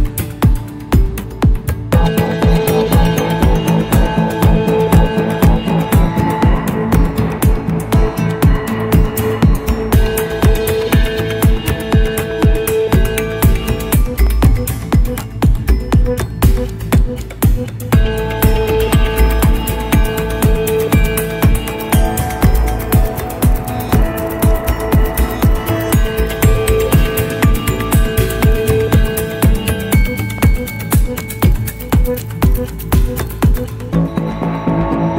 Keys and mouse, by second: 5.6 click, 7.5 click, 13.4 click, 15.5 click, 18.4-19.4 middle drag, 21.4 r, 26.6 Delete, 27.0-27.9 middle drag, 28.2 n, 29.5 click, 30.7 click, 32.8 click, 33.9 click.